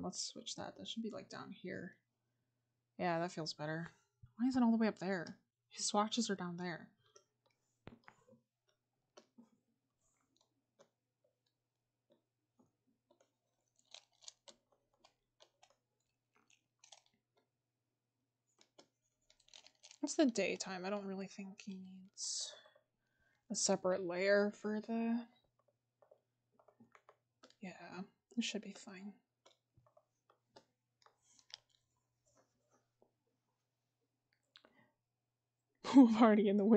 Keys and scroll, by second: 7.0-9.0 scroll.